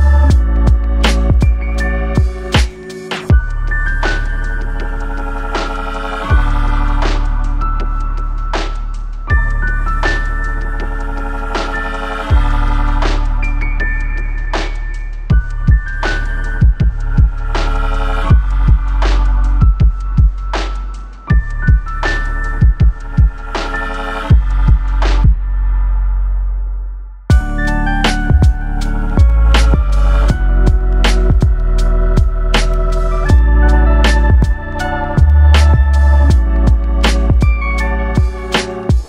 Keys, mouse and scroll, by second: 6.2-6.6 scroll down 2, 6.6 middle click, 8.5-9.0 scroll up 3, 9.3 shift+middle click, 10.8 click, 12.0 middle click, 13.2 click, 14.6 click, 16.8 click, 17.5 click, 18.1 click, 20.0 click, 20.9 click, 22.3 click, 23.2 click, 24.1 click, 25.7 click, 26.8 click, 28.0 shift+f, 30.1 click, 31.7 click, 33.4 click, 34.6 click.